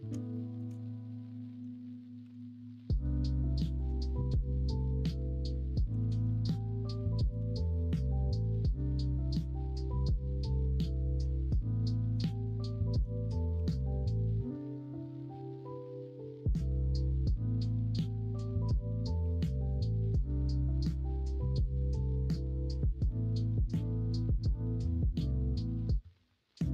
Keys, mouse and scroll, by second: 0.3 shift+middle click, 2.2 s, 3.9 middle click, 4.4 middle click, 5.8 s, 11.3-12.1 scroll up 2, 11.6 middle click, 12.1 shift+middle click, 12.2 middle click, 13.5 s, 17.1-18.3 middle drag, 18.4 alt+z, 18.6 middle click, 19.2 3, 21.4-23.0 drag, 23.0 middle click, 23.7 middle click.